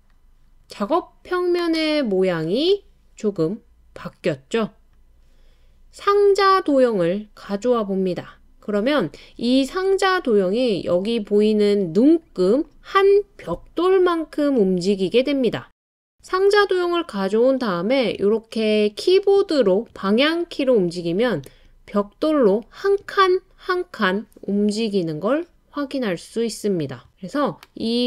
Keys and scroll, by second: 0.6 typing, 14.0 Right, 14.1-15.4 typing, 18.9 Left, 19.0 Left, 20.3 Down, 21.5 Right, 22.7 Right.